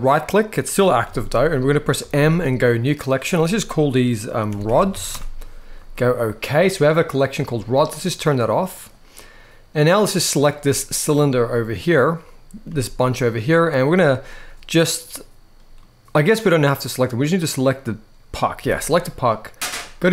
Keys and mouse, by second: 1.7 g, 1.7 m, 7.9 click, 10.0 click, 12.4 g, 12.8 right click, 15.5-16.5 middle drag, 17.4 click, 18.3 g, 18.8-20.1 right drag.